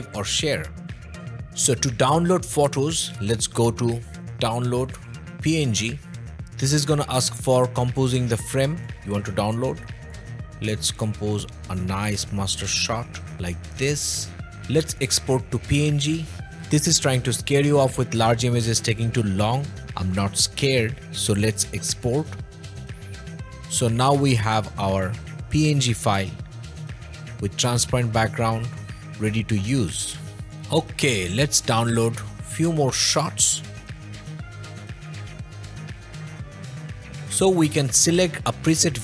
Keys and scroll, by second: 29.0 o.